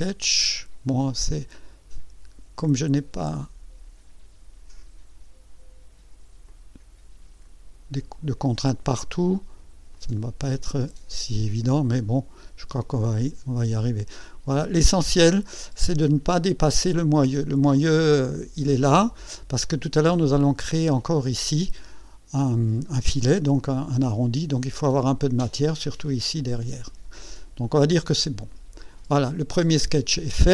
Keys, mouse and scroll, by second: 1.0-2.2 drag, 2.9-4.4 drag, 6.5-8.5 drag, 9.9 click, 12.7 click, 28.1 click.